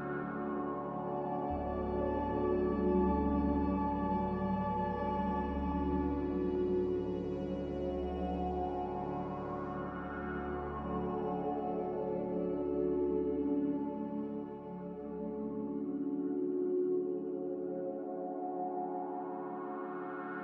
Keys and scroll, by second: 8.6 Delete.